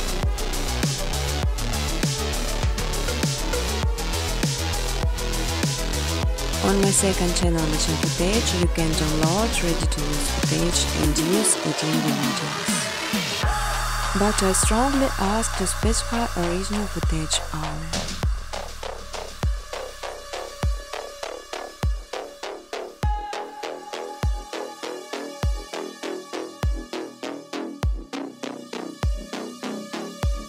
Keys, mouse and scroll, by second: 0.0-0.2 typing, 1.3 space, 1.7 space, 3.2 space, 8.4 click, 9.0 space, 9.7 space, 11.7 click, 11.9-14.8 typing, 15.9 click, 16.9 typing, 18.2 click, 18.6-21.1 typing, 20.9-21.7 scroll, 21.8 click, 22.1 click, 23.5 ctrl+c, 23.7 ctrl+d, 24.3 click, 25.9-26.9 scroll, 28.8 click, 29.1 ctrl+shift+c, 29.3 ctrl+d, 29.7 click.